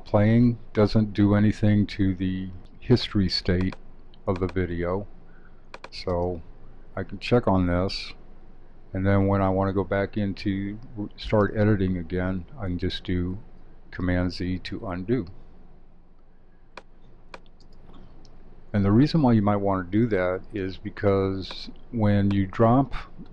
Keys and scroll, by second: 13.3 super+z.